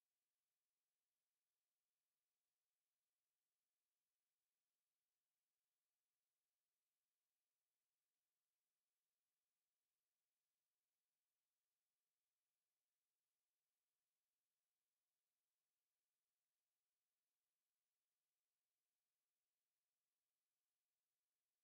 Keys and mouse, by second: 2.8 alt+click, 4.0 alt+right click, 4.6 alt+right click, 5.4 alt+middle click, 5.9 alt+middle click, 6.3 alt+click, 6.8 click, 7.1 alt+click, 10.6 alt+middle click, 11.2 alt+click, 11.8 click, 12.4 alt+click, 13.5 alt+right click, 13.9 alt+click, 14.4 ctrl+right click, 16.4 shift+right click, 18.6 ctrl+click, 20.5 ctrl+click.